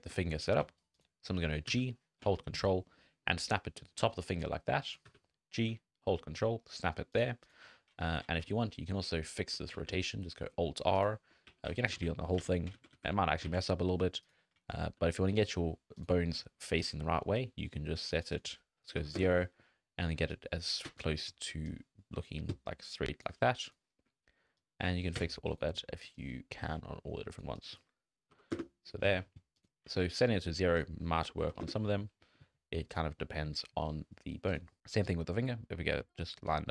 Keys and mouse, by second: 0.3 shift+click, 1.7 g, 4.9 click, 5.1 g, 8.0-8.4 drag, 8.6 middle drag, 8.7 shift+middle click, 9.1 middle click, 9.3 shift+middle click, 9.7 alt+r, 10.3 middle click, 10.6 shift+middle click, 11.5 a, 11.9 alt+r, 12.4 alt+a, 12.8 ctrl+z, 12.9 ctrl+z, 13.5 alt+a, 13.6 click, 14.3 click, 15.0 n, 16.0 click, 16.8-18.1 drag, 18.4 click, 20.4 shift+click, 21.7-23.2 shift+drag, 24.6 shift+click, 26.1-27.4 shift+drag, 27.6 click, 29.5 click, 30.0 click, 30.3 shift+click, 30.9 click, 32.2 click, 34.6 click, 35.0-36.7 drag.